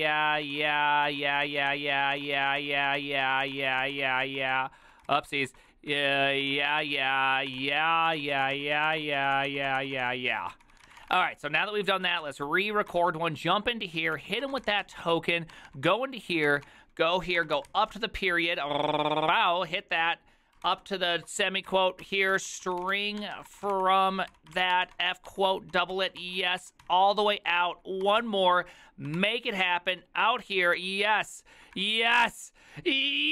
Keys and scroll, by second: 0.0-13.1 typing, 14.1-32.6 typing, 19.6 ctrl+c.